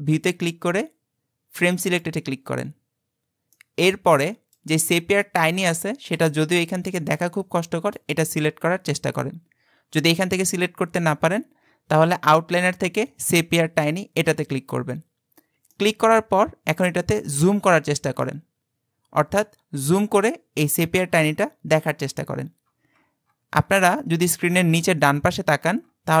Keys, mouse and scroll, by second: 3.5-7.1 middle drag, 7.1-7.9 scroll up 2, 7.9 click, 15.7-16.4 shift+middle drag, 16.4-17.2 scroll up 8, 17.2 shift+middle click, 17.7-18.3 scroll up 4, 18.3-20.1 shift+middle drag, 20.1-21.5 scroll up 20, 21.7-24.3 scroll up 60, 24.5-26.2 scroll up 180.